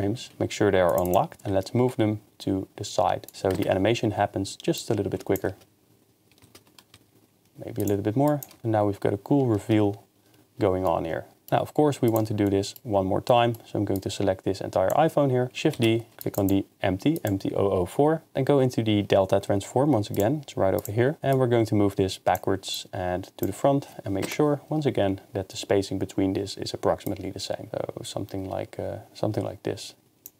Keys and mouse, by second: 0.2 g, 0.3 ctrl+Tab, 0.9 click, 1.5 ctrl+Tab, 1.5 g, 3.5 KP_0, 4.8 click, 5.5 shift+space, 6.9 g, 7.8-8.4 drag, 8.6 shift+space, 10.9 middle drag, 12.1 click, 14.0 drag, 16.3 click, 20.2 click, 21.3-22.4 drag, 22.9 click, 24.2 KP_0, 27.1-30.3 drag.